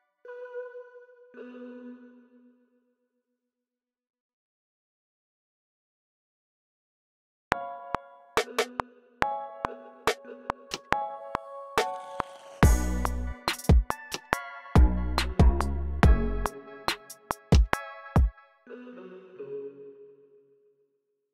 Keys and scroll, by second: 0.5-2.2 typing, 4.8 c, 5.7 super+k, 7.4 r, 8.0 super+k, 8.3 j, 9.6 j, 10.2 j, 12.6-19.8 typing, 21.1-21.3 typing.